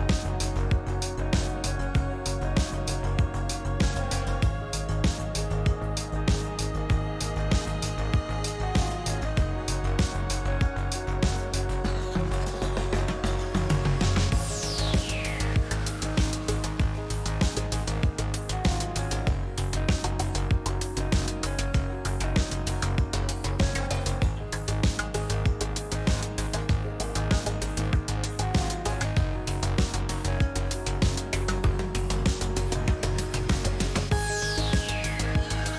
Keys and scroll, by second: 2.1 s, 2.7 s, 3.0 s, 5.7 s, 6.2 s, 7.2 shift+s, 8.2 shift+s, 11.3 shift+s, 12.2 s, 14.1 shift+s, 14.3 shift+s, 22.8 shift+s.